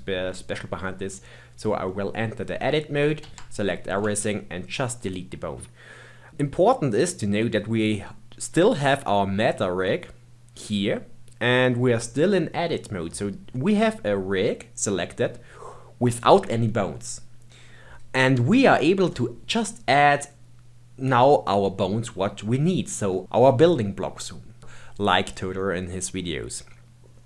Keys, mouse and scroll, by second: 3.2 a, 4.0 x, 27.0-27.2 scroll down 4.